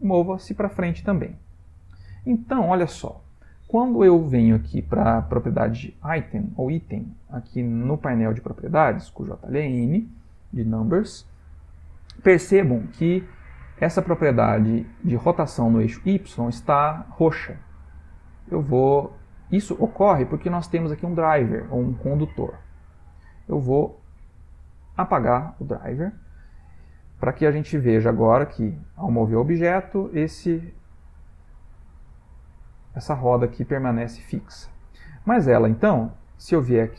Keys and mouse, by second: 1.8 click, 7.3 n, 7.8 n, 8.1 n, 8.4 n, 18.2 right click, 23.1 right click, 28.1 click, 28.5 g, 32.2 middle click, 33.7 middle click.